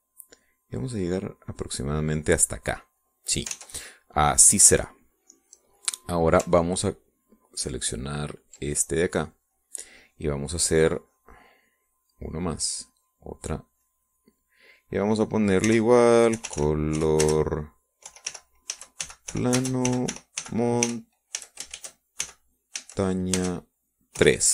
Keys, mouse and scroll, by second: 3.5 click, 4.4 click, 4.8 ctrl+s, 5.1-6.7 ctrl+drag, 6.7-7.7 scroll up 1, 8.2-10.3 ctrl+drag, 10.8 click, 12.2 click, 13.3 click, 14.3 click, 15.1 click, 16.9-24.5 typing.